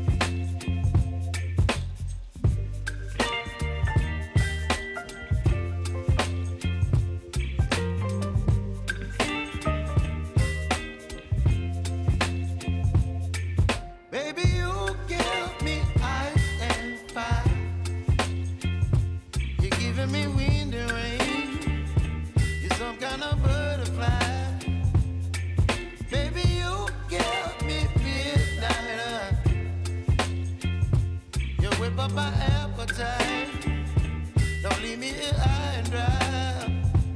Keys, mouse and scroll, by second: 3.2 ctrl+Num_Lock, 3.2 click, 3.2 ctrl+d, 4.7 ctrl+s, 6.4-10.2 drag, 10.2 ctrl+x, 11.7 click, 12.7 ctrl+shift+v, 13.9 click, 18.2-21.4 drag, 21.4 ctrl+x, 23.2 click, 24.3 ctrl+x, 25.5 click, 26.1 ctrl+shift+v, 26.8 click, 30.6-33.9 drag, 33.9 ctrl+x, 35.1 ctrl+x, 35.8 click, 36.2 ctrl+x.